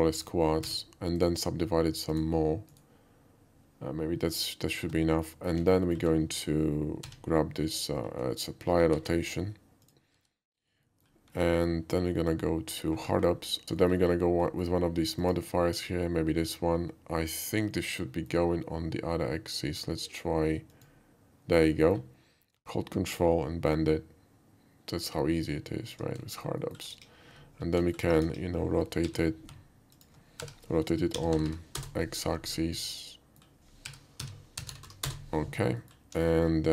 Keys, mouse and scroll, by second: 0.2 right click, 0.8 a, 1.2 right click, 2.1 click, 2.7 right click, 4.9 Tab, 5.4 middle click, 5.6 alt+middle click, 5.9 alt+middle click, 7.1 q, 8.9 ctrl+a, 9.8 click, 10.2 q, 10.9 middle drag, 13.1 alt+w, 13.6 alt+w, 13.8 middle click, 14.4 middle click, 15.2 click, 15.9-18.3 middle drag, 20.7 click, 21.7 middle click, 23.2-25.9 ctrl+drag, 26.3 alt+middle click, 26.6 alt+middle click, 26.9 KP_5, 27.8 alt+middle click, 28.2 KP_5, 29.0 r, 29.6 ctrl+r, 30.0 click, 30.4 r, 31.2 x, 31.3 9, 31.5 0, 31.8 Return, 32.8-33.4 middle drag, 33.8-34.9 typing, 35.1 Return, 35.8 alt+middle click, 36.4 middle click.